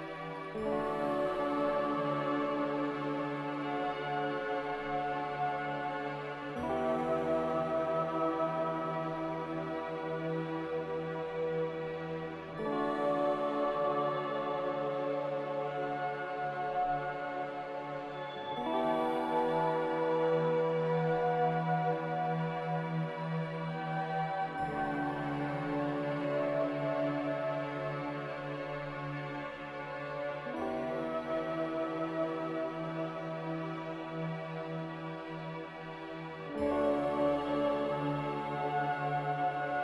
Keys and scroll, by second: 1.7 a, 10.8 a, 16.0 x, 17.2-18.1 typing, 20.6-21.4 typing, 22.7-24.4 typing, 27.5 z, 29.9 ctrl+c, 33.0 a, 39.6 ctrl+g.